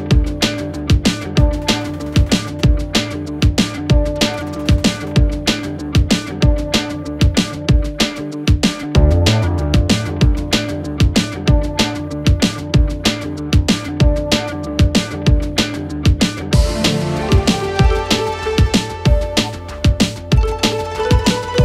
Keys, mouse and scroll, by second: 2.0 right click, 3.0 click, 4.1 right click, 6.4 click, 8.0 right click, 9.0 click, 12.9 click, 16.6 click.